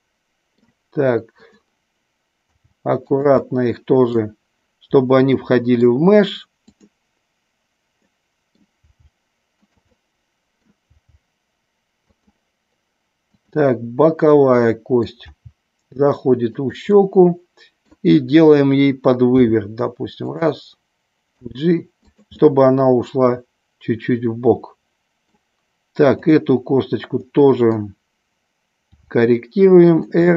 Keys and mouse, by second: 1.5 click, 2.5 g, 3.0 click, 3.2 middle click, 5.3 middle click, 6.5-7.5 drag, 8.0 middle click, 8.7 g, 9.6 click, 9.9 middle click, 10.9 g, 12.0 click, 14.1 middle click, 14.9 middle click, 15.1 g, 16.5 click, 16.9-17.9 middle drag, 19.4 r, 21.4 g, 22.4-25.3 middle drag, 26.1 click, 27.3 middle click, 28.9 r, 29.9 click, 30.2-30.3 middle drag.